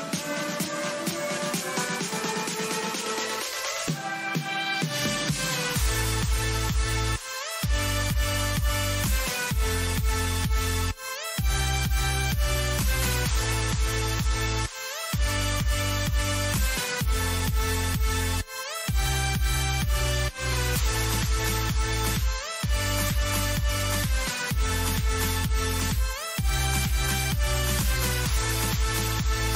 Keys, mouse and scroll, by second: 2.6-5.2 middle drag.